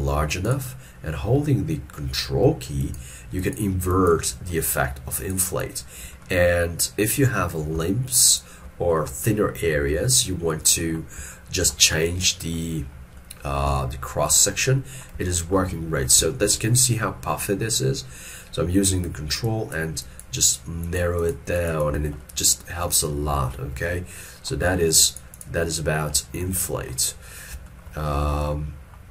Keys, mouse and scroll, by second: 2.9 ctrl+click, 3.5 ctrl+click, 4.0 ctrl+click, 4.5 middle click, 5.2 ctrl+click, 5.6 ctrl+click, 6.3 middle click, 8.3 ctrl+click, 9.0 middle click, 11.3 ctrl+middle click, 12.3 scroll down 1, 15.3 shift+middle click, 16.4 shift+middle click, 16.7 shift+middle click, 19.5 ctrl+click, 20.1 ctrl+click, 20.5 ctrl+click, 20.9 ctrl+click, 21.6 ctrl+click, 22.3 middle click, 24.0 shift+middle click, 25.2 ctrl+click, 25.8 scroll down 1, 26.2 middle click, 27.8 shift+middle click, 28.1 shift+middle click.